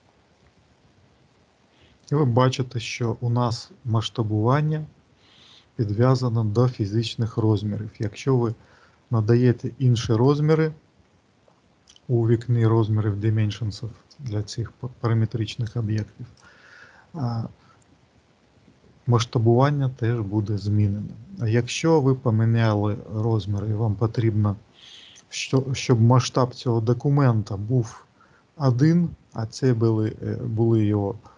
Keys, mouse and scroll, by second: 8.3 click, 23.0 click.